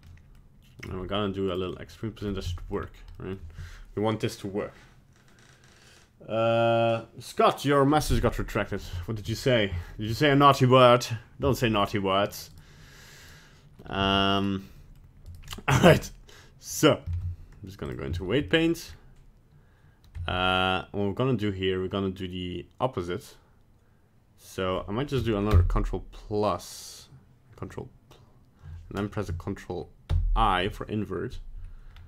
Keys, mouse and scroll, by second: 0.1 middle click, 0.8 right click, 1.0 g, 1.7 middle click, 2.2 scroll up 1, 2.5 shift+middle click, 2.8 scroll down 1, 3.2 middle click, 8.0-8.5 scroll up 1, 8.5-8.9 scroll down 1, 9.0 shift+middle click, 9.4 middle click, 9.9 shift+middle click, 10.2 middle click, 12.5 right click, 13.3 right click, 14.0 g, 14.7 middle click, 15.3 right click, 15.8 ctrl+Tab, 16.7 right click, 17.1 ctrl+Tab, 18.2 shift+middle click, 18.5 middle click, 18.9 scroll up 1, 20.2 Tab, 25.5 ctrl+KP_Add, 30.1 ctrl+i, 31.9 scroll down 1.